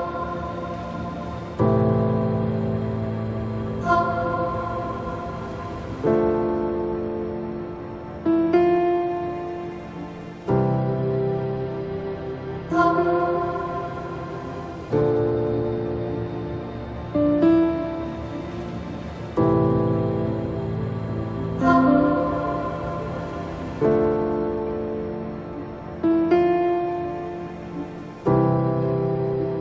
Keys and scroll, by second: 3.1 ctrl+z, 22.5 space.